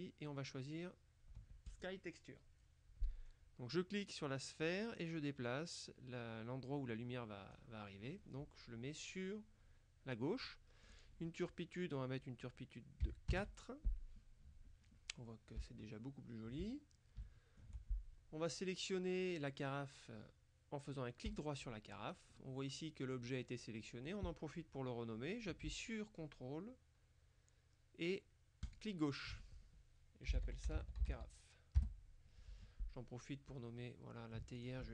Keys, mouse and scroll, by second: 1.8 click, 4.7-8.1 drag, 11.0 click, 13.1 KP_4, 13.4 KP_Enter, 15.7-16.8 shift+middle drag, 16.8-17.3 shift+scroll up 1, 17.3 shift+middle click, 21.4 right click, 28.8 ctrl+click, 30.4-31.6 typing, 32.0 Return, 33.6 click, 34.6 ctrl+click.